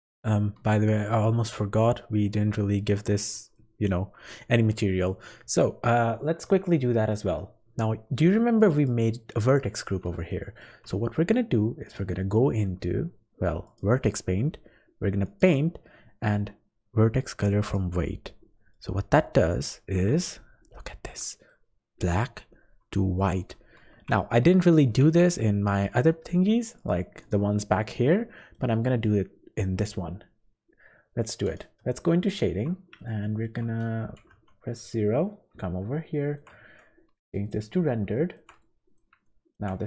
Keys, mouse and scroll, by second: 1.6 scroll up 2, 3.5 shift+middle click, 4.4-4.8 scroll up 2, 6.4 scroll up 1, 6.9 shift+middle click, 7.3-7.7 scroll up 2, 8.7 click, 10.3 shift+middle click, 11.8 click, 15.2 click, 18.7 middle click, 19.3 scroll up 4, 19.7 shift+middle click, 20.2 scroll up 2, 21.2 middle click, 23.5-24.1 scroll down 4, 23.9 Tab, 25.0 Tab, 26.7 click, 28.3 middle click.